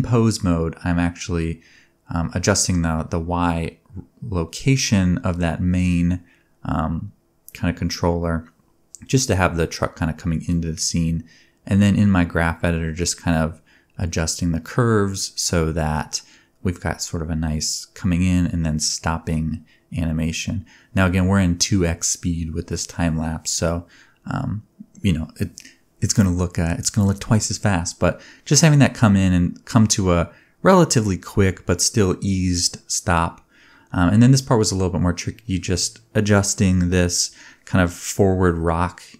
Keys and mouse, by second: 0.6 click, 2.4 space, 3.1-7.5 drag, 4.6 space, 5.0 middle click, 5.0 right click, 5.3 g, 6.2 middle click, 6.2 right click, 6.5 middle click, 6.5 right click, 6.6 s, 7.6 space, 9.8-12.7 drag, 9.8-10.5 middle drag, 9.8-10.5 right drag, 9.8 space, 10.8 g, 11.6 middle click, 11.6 right click, 11.7 g, 12.4 middle click, 12.4 right click, 12.5 space, 16.4 space, 16.5-18.1 shift+drag, 17.3 g, 18.1 middle click, 18.2 g, 20.3 click, 21.7-25.8 drag, 25.8 middle click, 25.9-26.7 drag, 31.3 a, 32.3-33.6 drag, 32.5 a, 33.7 space, 35.2 space, 37.2 shift+click, 37.4-39.1 shift+drag, 37.5 shift+d, 39.1 middle click.